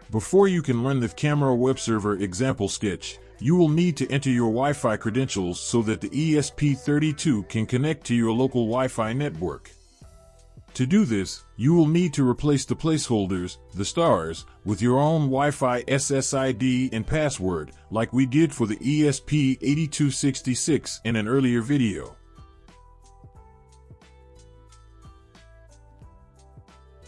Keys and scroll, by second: 20.1 ctrl+z, 20.1 BackSpace, 23.7-27.0 typing.